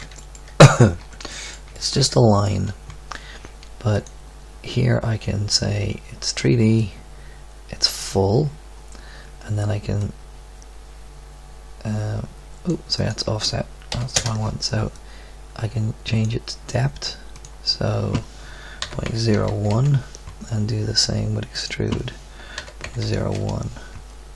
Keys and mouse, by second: 1.0 Tab, 3.9-10.0 middle drag, 16.7 middle click, 20.3-21.5 middle drag, 23.3-24.3 middle drag.